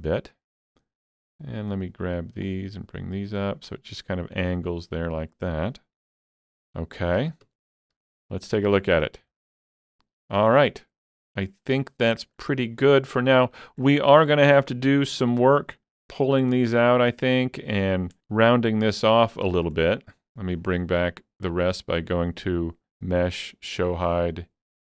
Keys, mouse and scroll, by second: 0.5 ctrl+z, 1.2-4.9 drag, 4.9-6.3 scroll down 2, 6.3 scroll down 1, 6.4 alt+z, 7.2 alt+a, 7.5 Tab, 8.0 alt+a, 8.1-8.5 scroll down 2, 8.5 middle click, 9.0-9.4 scroll down 3, 9.4-12.1 shift+middle drag, 11.8 scroll up 2, 12.6-14.0 shift+middle drag, 14.0 scroll up 2, 14.9 Tab, 15.1-16.6 shift+middle drag, 16.6-19.0 middle drag, 19.0 scroll down 3, 19.3 shift+middle click, 19.8 shift+middle click, 21.5 click.